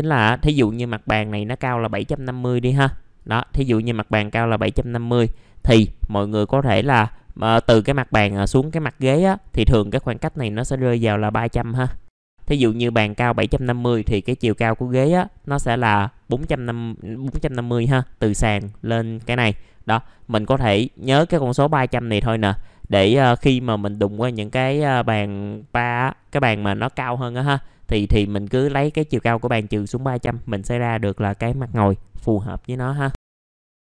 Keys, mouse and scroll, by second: 33.4 middle click, 33.7 click.